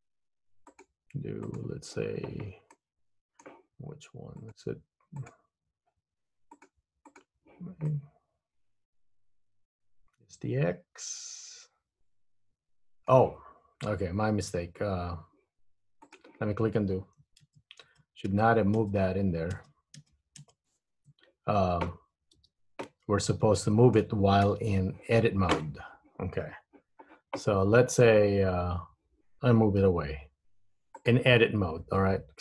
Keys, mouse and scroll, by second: 0.8 click, 2.8 middle click, 4.6 click, 6.6 click, 8.0 middle click, 16.2 click, 17.6 super+z, 18.0 super+z, 18.5 super+z, 18.9 super+z, 19.8 super+z, 20.2 super+z, 20.6 super+z, 22.5 Tab, 23.2-23.6 scroll up 2, 23.8 shift+middle click, 24.2-24.6 shift+scroll down 1, 24.6 KP_1, 30.0 g.